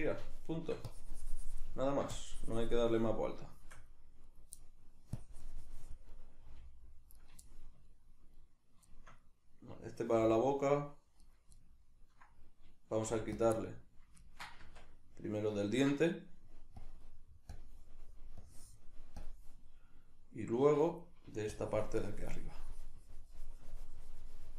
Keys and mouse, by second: 0.0 shift+middle click, 0.8 click, 1.8 ctrl+middle click, 2.1 click, 3.0-4.3 middle drag, 4.3 right click, 4.6 middle click, 5.2 click, 6.1-7.3 middle drag, 6.5 g, 7.3 right click, 7.5 shift+middle click, 8.4 right click, 8.9-11.3 shift+middle drag, 10.2 r, 11.3 right click, 11.6-13.5 ctrl+middle drag, 13.1 f, 13.5 click, 13.5-16.8 middle drag, 14.6 Tab, 16.8 click, 17.5 click, 18.4-24.5 drag, 20.5 Tab.